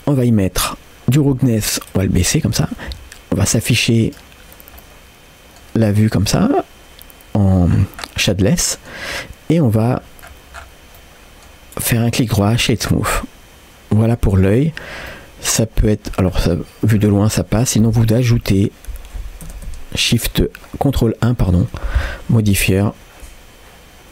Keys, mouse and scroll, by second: 0.1-0.4 scroll down 2, 1.9 click, 1.9-2.7 scroll down 2, 4.0-5.1 drag, 5.1 middle click, 7.7-8.8 scroll down 4, 8.3 middle click, 9.2-9.6 scroll down 2, 9.6 middle click, 10.0-11.0 scroll up 5, 11.0 middle click, 11.8 right click, 12.9 scroll down 2, 13.2-14.2 middle drag, 15.1-16.2 middle drag, 16.3-17.1 scroll down 1, 17.1-17.7 scroll down 2, 17.7 scroll up 3, 19.5 ctrl+1, 21.5 middle click, 21.5 scroll up 1, 22.6 g.